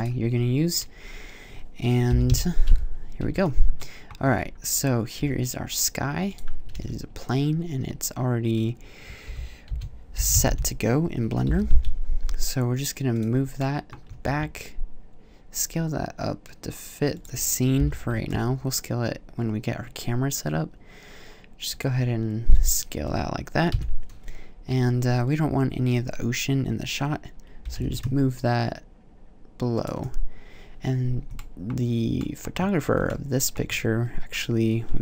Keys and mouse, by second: 1.9 KP_7, 2.1 KP_5, 3.0 z, 5.0 s, 6.2-7.0 drag, 7.0 alt+z, 9.1 r, 11.3 g, 13.0-13.4 drag, 14.1 s, 17.0-20.8 drag, 20.8 g, 23.5 KP_1, 27.4 g, 29.7-30.9 drag, 32.1 middle click, 33.0-35.0 middle drag.